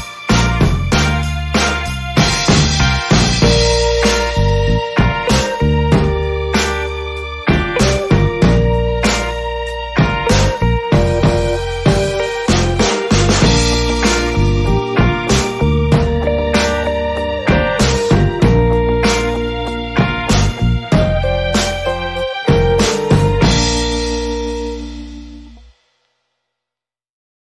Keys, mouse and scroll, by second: 0.4 click, 3.7 a, 4.1 z, 5.8 Tab, 8.0 a, 10.1 KP_5, 14.2-15.4 middle drag, 15.8-19.7 drag.